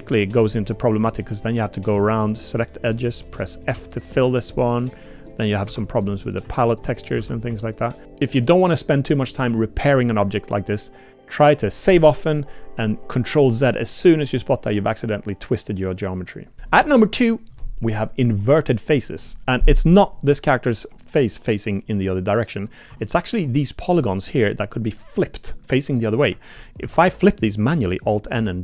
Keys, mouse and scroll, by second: 0.6 click, 1.2 click, 1.4 middle click, 2.8 shift+click, 3.4 click, 3.7 f, 4.6 click, 5.2 click, 5.7-8.0 typing, 5.9 click, 8.4 click, 16.6 Tab, 22.9 Tab, 24.5 shift+click, 26.8 alt+n.